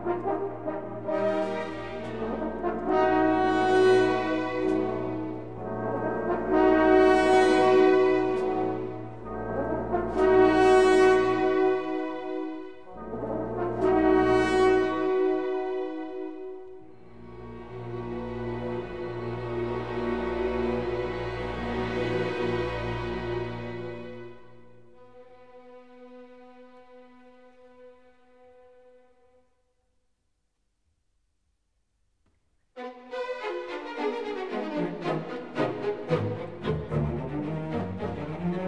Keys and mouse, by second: 0.6 2, 1.0 alt+click, 1.9 f, 3.0 1, 6.8 k, 12.6 k, 14.9 k, 20.2 k, 24.6 k, 32.3 alt+h, 36.5 Tab, 37.0 click, 37.5 Tab, 38.4 click.